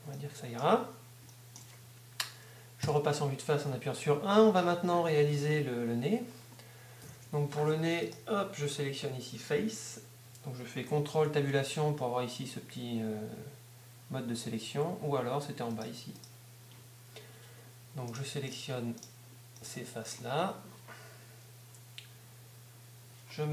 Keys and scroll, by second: 4.8 1, 5.2 Tab, 6.8 z, 11.3 ctrl+Tab.